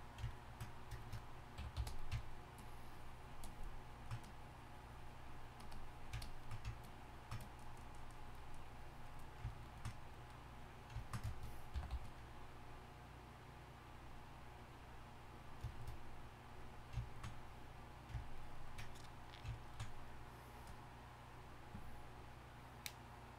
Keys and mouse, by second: 1.6 y, 1.7 f, 2.6-9.2 drag, 11.7 g, 11.9 f, 13.0-15.7 drag.